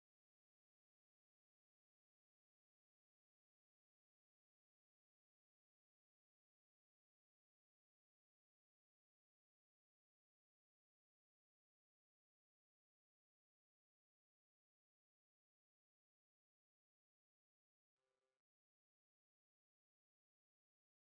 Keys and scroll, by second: 11.2 ctrl+z.